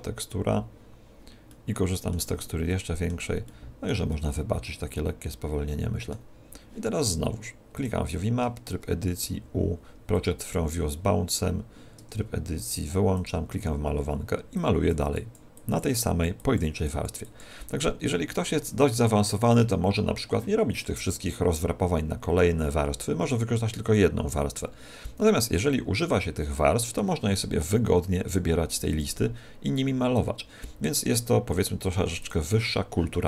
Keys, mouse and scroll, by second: 0.1 click, 1.4 middle click, 2.6 middle click, 3.4 middle click, 7.6 click, 8.4 Tab, 9.1 u, 11.9 Tab, 13.1 click, 14.6 click, 15.4 click, 28.8 click, 32.1 click.